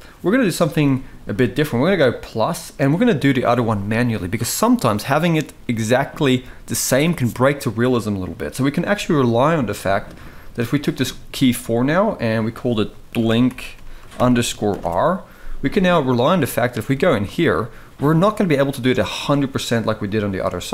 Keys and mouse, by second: 1.9 click, 11.0-11.3 shift+middle drag, 12.2-14.5 drag, 16.5 Tab, 17.0 shift+middle click, 18.4 shift+click, 19.9 shift+middle click.